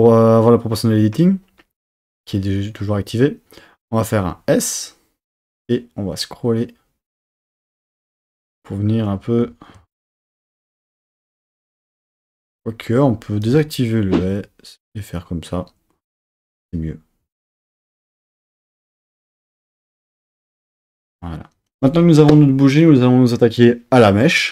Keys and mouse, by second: 4.2 s, 8.0 click, 9.9 super+z, 10.4 s, 12.4 click, 12.6 super+z, 13.4 o, 14.2 s, 16.2 click, 16.4 Tab.